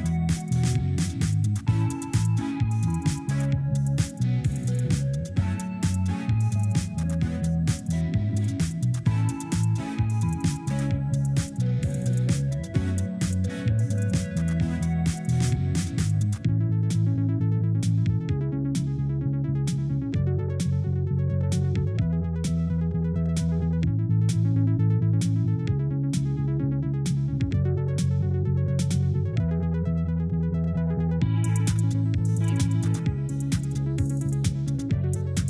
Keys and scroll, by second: 1.6 2, 1.9 Return, 13.7 Delete.